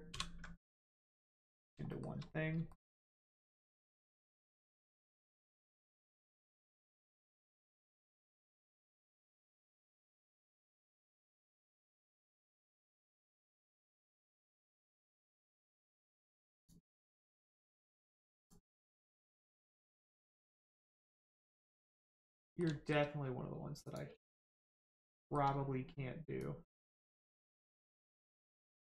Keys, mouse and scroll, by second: 0.1 ctrl+j, 1.0 middle click, 1.9 shift+middle click, 2.3 scroll up 1, 2.7 shift+middle click, 2.9 scroll up 1, 5.3 click, 5.8 shift+middle click, 7.1 click, 7.1 click, 16.5 click, 17.1 middle click, 17.9-18.4 scroll down 1, 18.4 click, 18.7 scroll down 1, 18.9 middle click, 19.6 click, 20.1 middle click, 20.5 shift+middle click, 21.0 middle click, 21.1 middle click, 21.5 click, 22.4 middle click, 22.8 shift+middle click, 22.9 scroll up 1, 23.8 click, 24.2 shift+middle click, 24.7 middle click, 25.2 shift+middle click, 26.3 click, 26.4 click.